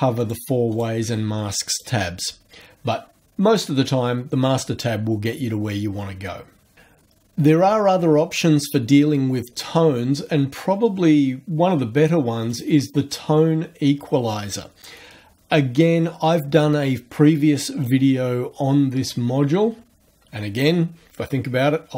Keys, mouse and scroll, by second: 0.2 click, 0.7 click, 1.6 click, 12.5 click.